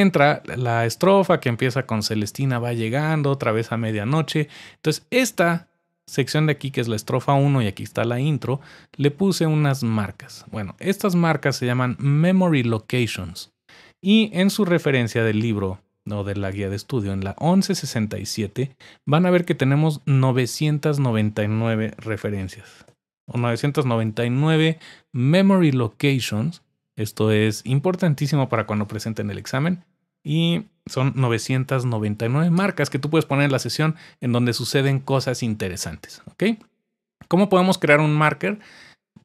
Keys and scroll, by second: 22.4-23.3 typing.